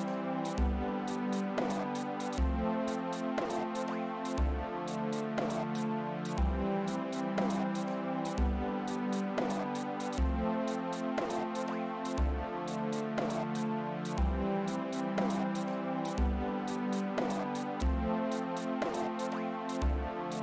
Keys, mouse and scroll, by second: 2.7 click, 7.7 click, 12.4 click, 15.8 click, 19.1-20.2 drag.